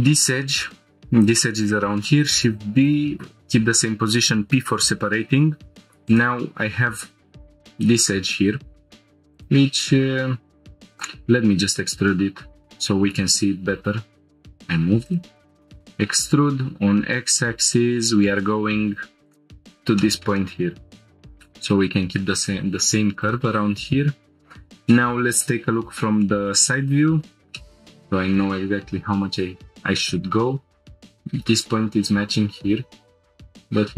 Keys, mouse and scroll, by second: 2.1 shift+d, 2.9 right click, 3.2 p, 5.3 Tab, 6.1 click, 7.4 Tab, 8.7 1, 9.3-9.8 drag, 10.9 ctrl+click, 12.0 g, 14.2 right click, 15.1 right click, 15.1 g, 15.5 e, 16.6 x, 19.3 click, 19.5-19.9 scroll down 2, 20.0 shift+middle click, 20.4-21.6 middle drag, 23.2 click, 24.9 shift+middle click, 25.6-26.1 scroll up 3, 26.2 shift+middle click, 26.7-27.0 scroll up 2, 27.2 scroll down 1, 27.5 shift+middle click, 31.0 click.